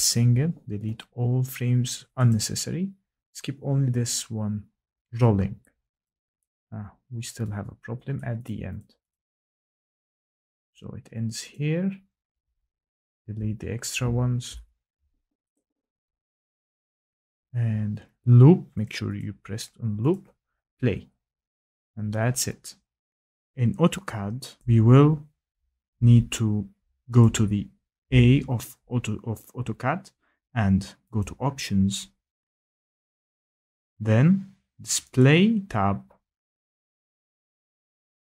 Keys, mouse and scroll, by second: 1.0 ctrl+shift+Delete, 5.1 click, 6.0 click, 8.1 click, 8.4 click, 8.7 click, 9.1 click, 9.4 click, 10.1 click, 10.7 click, 11.5 click, 15.7 ctrl+shift+Delete, 19.1 click, 19.1 click, 20.1 click, 23.7 F8, 23.7 click, 28.6 click, 30.5 click, 32.9 click, 35.6 click, 38.2 click.